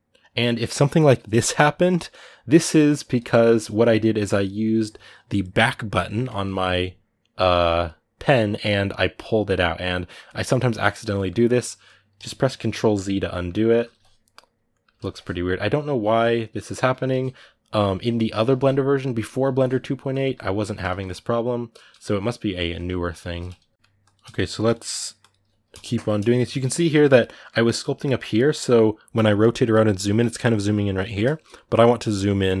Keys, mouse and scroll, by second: 1.7 right click, 3.0-8.7 ctrl+middle drag, 8.7-10.3 right drag, 10.3-11.9 ctrl+middle drag, 11.9 ctrl+z, 13.0 middle click, 13.7 ctrl+z, 14.5 middle click, 14.9 ctrl+z, 16.3 middle click, 16.8 ctrl+z, 17.9 middle click, 18.3 ctrl+z, 19.3 ctrl+z, 20.0 ctrl+z, 20.7 ctrl+z, 21.5-23.2 middle drag, 23.2 ctrl+z, 23.7 ctrl+middle click, 23.8 click, 24.0 middle click, 24.4 click, 24.6 middle click, 25.0-26.2 drag, 26.2-32.6 middle drag.